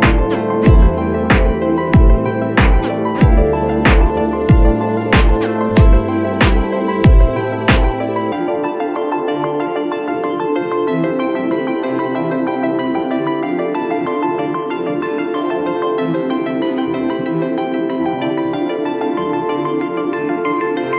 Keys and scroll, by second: 0.2 r, 2.4 Escape, 2.5 space, 3.7 space, 3.9 r, 3.9 space, 6.1 space, 7.2 space, 8.4 e, 8.7 ctrl+z, 10.0 b, 12.1 space, 12.3 r, 14.0 space, 14.2 r, 16.6 ctrl+alt+z, 16.9 Escape, 17.0 ctrl+space, 17.7 ctrl+space, 19.9 F2, 20.6 b.